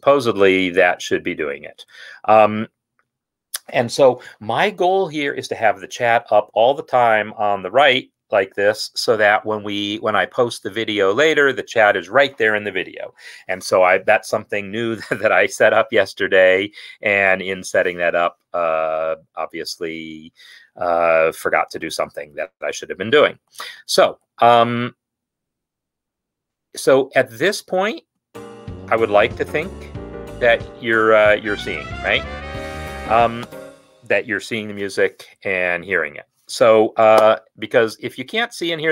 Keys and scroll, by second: 28.2 space, 33.6 space.